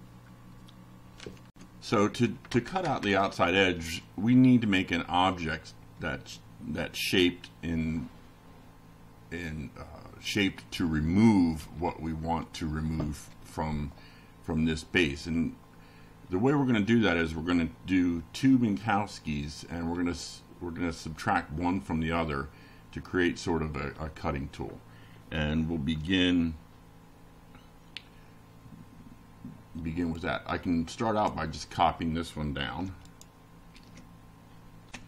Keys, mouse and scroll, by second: 1.5 ctrl+r, 2.5 Return, 27.8 click, 30.2 ctrl+c, 30.5 ctrl+click, 31.1 ctrl+v, 32.2 ctrl+r, 32.6 ctrl+Return, 33.8 shift+], 34.5 Up.